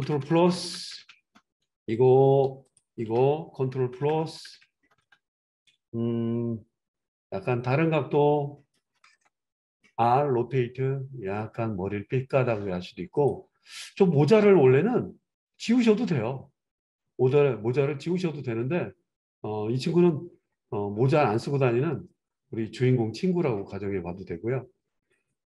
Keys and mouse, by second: 0.0 ctrl+KP_Add, 0.2 ctrl+KP_Add, 0.4 ctrl+KP_Add, 0.6 ctrl+KP_Add, 0.7 ctrl+KP_Add, 0.9 ctrl+KP_Add, 1.1 ctrl+KP_Add, 1.3 ctrl+KP_Add, 2.7 shift+click, 2.9-25.5 shift+middle drag, 3.9 ctrl+KP_Add, 4.1 ctrl+KP_Add, 4.3 ctrl+KP_Add, 4.5 ctrl+KP_Add, 4.7 ctrl+KP_Add, 4.8 ctrl+KP_Add, 5.0 ctrl+KP_Add, 10.0 r, 14.5 g.